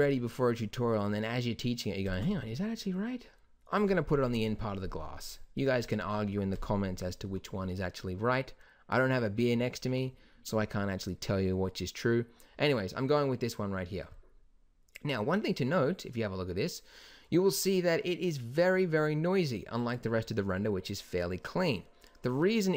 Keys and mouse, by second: 2.2 z, 4.3 KP_0.